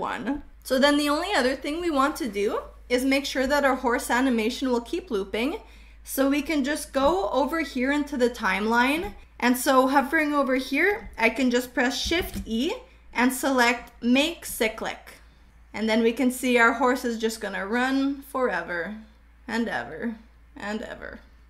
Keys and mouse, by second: 7.3-8.9 shift+middle drag, 12.1 shift+e, 15.2-21.3 drag.